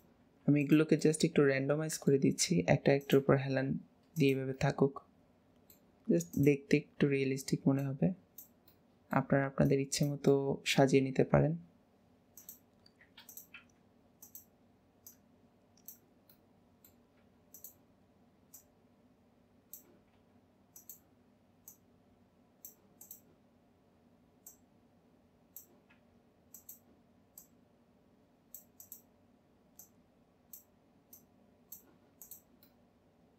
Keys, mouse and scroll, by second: 1.0 middle click, 1.3-2.4 middle drag, 2.4 r, 4.5-6.3 middle drag, 6.3 click, 7.8 click, 8.7 middle click, 10.3-11.1 middle drag, 11.1 r, 15.1 click, 16.3-17.2 middle drag, 17.2 r, 18.5 click, 21.7 click, 23.0 click, 24.5 click, 25.9 r, 27.3 click, 28.8 click, 29.8 click, 31.1 click, 32.1 click, 32.7 middle click, 33.0 middle click.